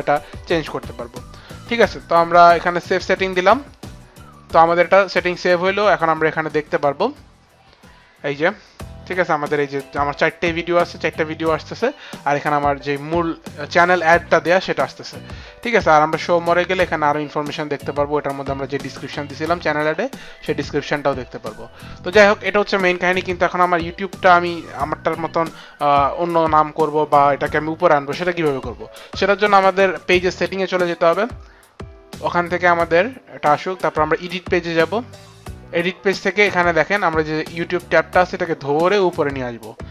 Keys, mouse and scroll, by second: 2.9 click, 16.3 click, 21.9 click, 30.0 click, 34.1 click, 38.2 click.